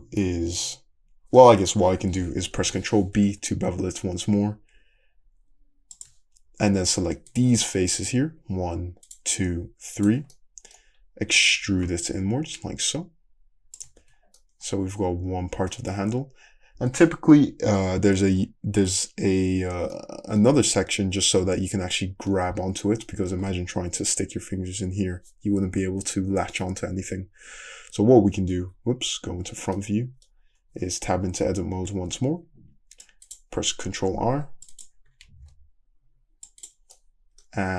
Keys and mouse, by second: 2.6 ctrl+b, 3.8-7.3 shift+middle drag, 6.7 3, 7.3 drag, 7.6-10.0 shift+middle drag, 10.0 shift+click, 10.1-13.1 shift+middle drag, 11.6 e, 13.8-27.9 shift+middle drag, 14.0 Tab, 27.4 `, 27.9 `, 28.7 `, 29.0 middle drag, 29.7-30.8 middle drag, 30.8 Tab, 32.3 ctrl+r, 34.4 ctrl+r, 35.3 ctrl+r.